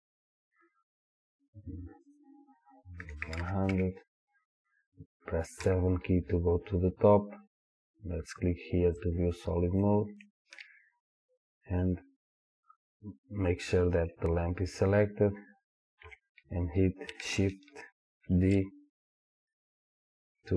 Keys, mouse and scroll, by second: 2.1-9.2 drag, 3.4 KP_0, 3.8 KP_Enter, 5.7 KP_7, 6.6-9.0 scroll down 2, 9.9-18.4 shift+middle drag, 16.1 KP_7, 18.4 shift+d.